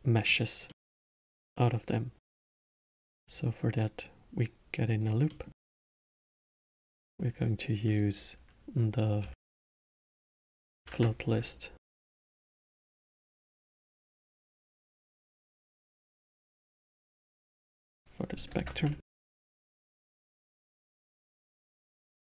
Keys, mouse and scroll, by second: 0.7-2.4 middle drag, 2.4-5.0 drag, 5.2-6.0 middle drag, 6.0-9.0 drag, 12.8-13.8 drag, 14.2-17.2 drag, 17.5-20.5 drag, 21.8 click.